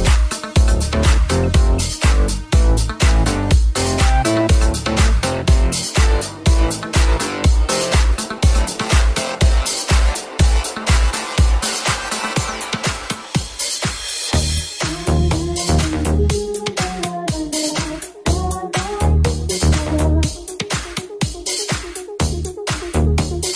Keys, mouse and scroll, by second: 0.0-5.1 middle drag, 5.1 right click, 5.1-23.5 middle drag, 5.4 Tab, 8.2 ctrl+r, 12.4 ctrl+r, 20.4 alt+right click.